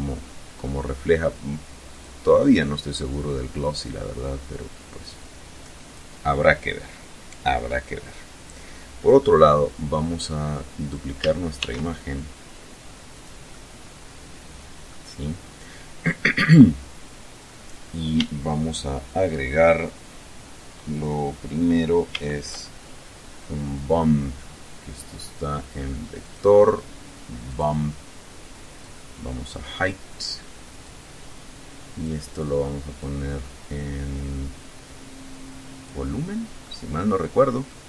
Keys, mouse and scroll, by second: 1.3 click, 3.1 click, 4.6 click, 8.9 click, 10.1 right click, 10.9 shift+d, 12.5 click, 12.9-14.4 middle drag, 21.5 shift+a, 25.6 click, 26.9 click, 28.2 click, 30.2-31.6 drag, 32.3-35.4 drag, 36.0-37.2 middle drag.